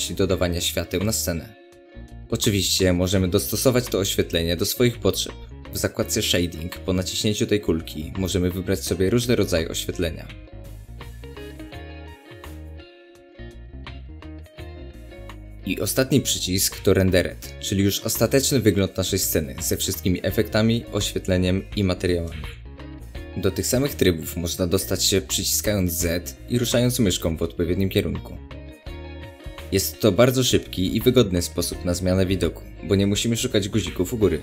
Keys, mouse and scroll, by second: 6.3-13.4 drag, 13.4-18.1 middle drag, 18.1 click, 19.6 scroll down 1, 19.8-34.4 middle drag.